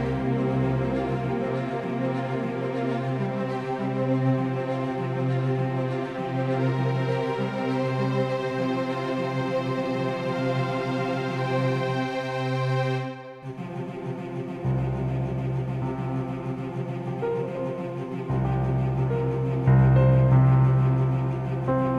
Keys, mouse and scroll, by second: 3.7 KP_0, 5.7-7.9 right drag, 8.4 KP_0, 10.2-12.6 middle drag, 13.8 g, 20.0 r.